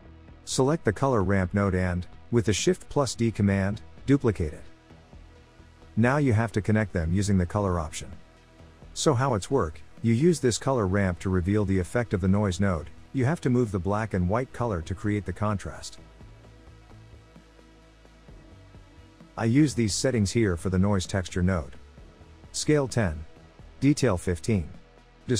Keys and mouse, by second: 0.4 click, 1.0 click, 2.4 shift+d, 4.3 click, 5.8-6.8 drag, 7.7 click, 8.8 click, 10.2 click, 12.6-17.7 drag, 18.6-20.5 drag, 21.4-23.1 drag, 23.6-25.2 drag.